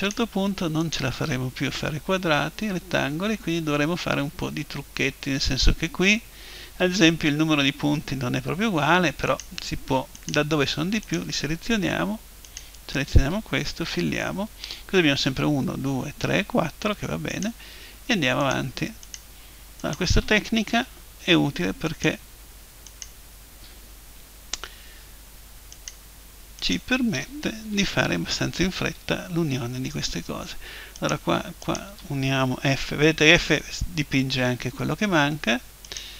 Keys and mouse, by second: 1.8 middle click, 1.8 f, 2.4 right click, 9.3-14.1 right drag, 13.9 f, 17.3-21.5 right drag, 20.7 f, 21.5 middle click, 21.9-24.7 right drag, 25.7-28.3 right drag, 27.7 f, 30.9-33.3 right drag, 32.7 f, 33.3 middle click, 35.9-36.1 right drag.